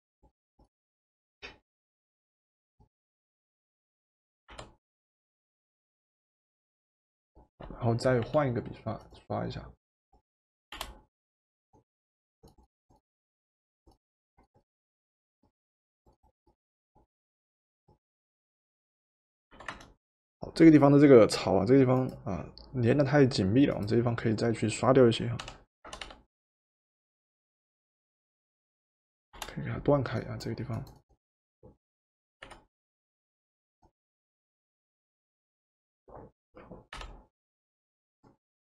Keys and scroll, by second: 4.5 v, 8.2 b, 10.7 Return, 19.5 v, 25.5 b, 26.1 b, 29.3 Return, 32.5 v, 37.0 b.